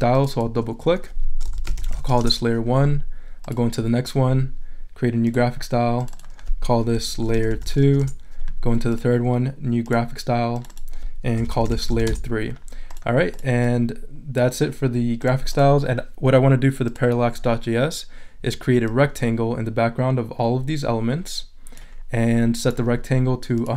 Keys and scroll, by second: 1.3-2.6 typing, 7.0-8.3 typing, 11.1-12.4 typing.